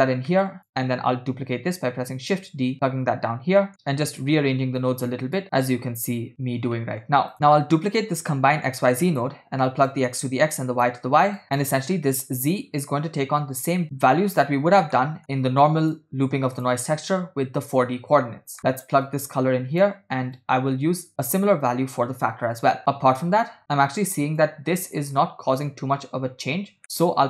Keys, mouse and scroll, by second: 0.4 middle click, 0.7 click, 1.6 shift+d, 3.0-3.6 scroll down 3, 3.7 click, 3.7 middle click, 4.8 click, 5.5 click, 6.9 middle click, 7.4 scroll down 1, 8.1 shift+d, 9.9-10.9 drag, 11.4-11.7 drag, 15.1 middle click, 15.9 click, 16.6 click, 18.6 middle click, 19.1-19.9 drag, 20.4-23.6 drag, 23.6 middle click, 24.4 click, 26.9 middle click.